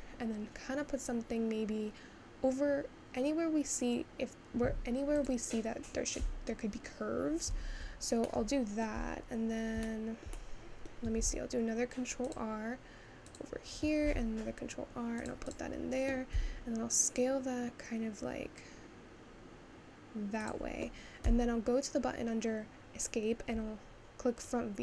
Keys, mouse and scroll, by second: 8.2 middle click, 9.0-9.6 scroll up 2, 9.6 scroll down 1, 9.9-11.4 shift+middle drag, 11.4 ctrl+r, 14.0 ctrl+r, 16.4 s, 23.6 `.